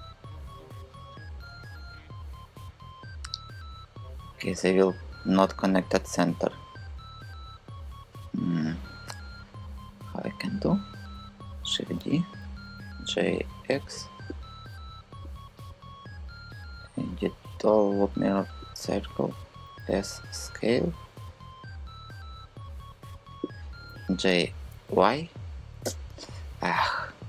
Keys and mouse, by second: 11.3 shift+d, 11.6 Return, 12.4 g, 13.1 x, 18.3 click, 19.4 s, 23.5 g.